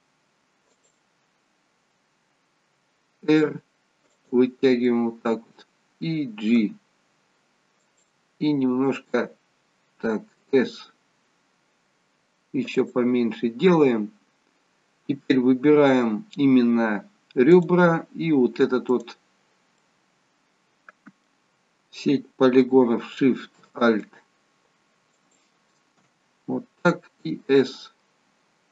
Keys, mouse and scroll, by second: 3.2 r, 4.8 middle click, 6.6 g, 10.6 s, 13.9-15.3 scroll up 1, 15.3 middle click, 15.3-15.7 scroll up 1, 17.6 click, 19.9 middle click, 24.0 alt+shift+click, 27.4 s.